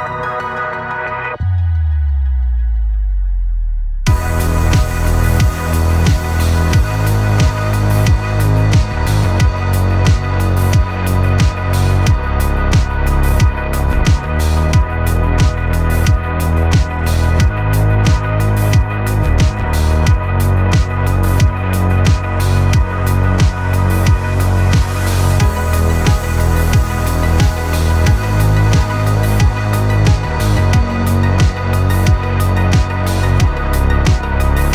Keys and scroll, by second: 8.0 v, 16.5 v, 28.1 Escape, 33.6 Escape.